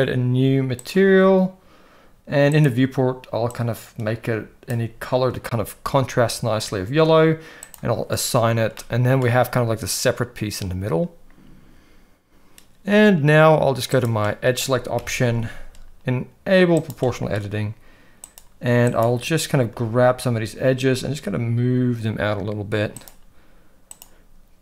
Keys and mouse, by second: 2.5 click, 7.7 click, 8.7 middle click, 13.9 click, 15.0 KP_1, 15.2 alt+a, 16.8 click, 18.9 shift+click, 19.7 g, 23.9 click.